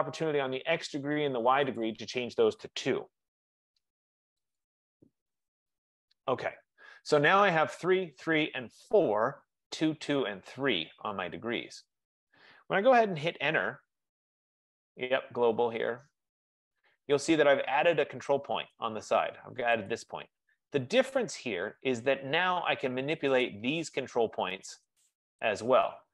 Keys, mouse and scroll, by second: 2.0 click, 3.1 Return, 4.8 click, 5.2 Return, 13.2 F15, 13.4 Return, 16.0-17.7 drag, 17.7-19.1 middle drag, 19.1 click, 20.1 click, 23.5 click, 25.0 click.